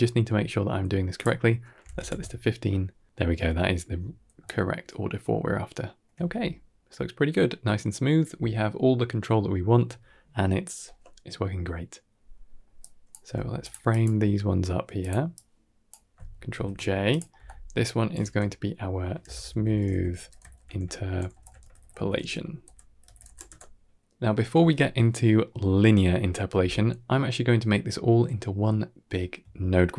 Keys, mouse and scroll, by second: 0.2 scroll up 2, 1.0 click, 3.0-3.3 middle drag, 4.7-5.8 shift+drag, 6.3-7.6 middle drag, 9.1 scroll down 1, 9.4-10.5 shift+middle drag, 12.1 scroll down 3, 12.3 middle click, 12.7 drag, 13.1 g, 13.8 drag, 14.0 g, 15.2 click, 16.4 ctrl+j, 17.0 click, 17.2 F2, 19.4 shift+o, 21.2 shift+BackSpace, 24.9-25.3 middle drag, 25.9-26.3 middle drag, 27.5 middle click.